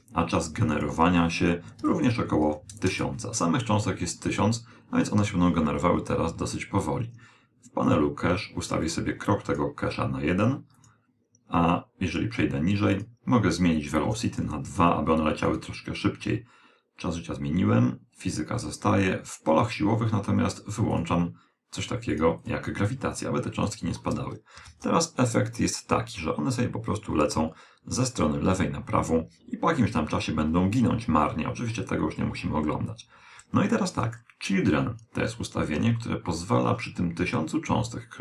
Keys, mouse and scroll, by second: 0.7 click, 2.3 0, 7.8-12.4 drag, 12.9-17.1 drag, 20.9-24.8 drag, 24.6 alt+a, 33.6 Escape, 35.7 a, 37.2 click.